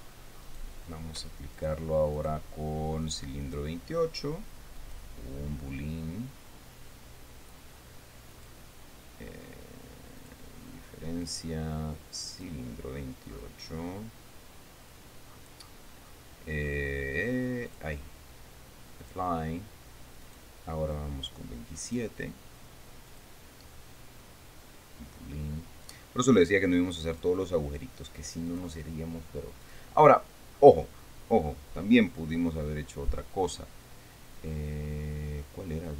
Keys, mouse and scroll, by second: 1.0 shift+right click, 2.1 shift+right click, 2.7 right click, 4.0 right click, 5.3 click, 8.9 click, 10.7 click, 11.8 click, 12.9 click, 13.5-14.7 scroll down 5, 14.8-15.8 scroll down 2, 15.9-16.9 scroll down 6, 17.2 scroll down 2, 18.3 click, 19.6 click, 20.8 right click, 22.4 right click, 23.7 click, 26.4 click, 27.7 click, 29.0 click, 30.2 click, 31.1-31.8 scroll down 4, 32.0 scroll down 2, 32.5-33.1 scroll down 2, 34.3-34.8 scroll down 2, 35.0 scroll down 2, 35.6-35.9 scroll down 4.